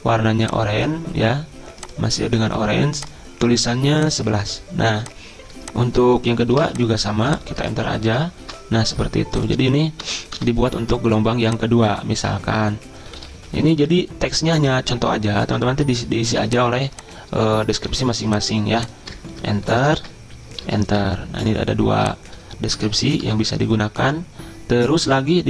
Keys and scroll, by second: 6.6 ctrl+c, 7.6 Return, 7.8 Return, 7.9 Return, 8.1 Return, 8.4 ctrl+v, 10.0 BackSpace, 10.4 BackSpace, 13.4 2, 18.1 ctrl+c, 19.1 Return, 19.3 Return, 20.0 ctrl+v, 20.5 Return, 20.7 Return, 20.8 ctrl+v, 22.8 BackSpace, 23.2 BackSpace.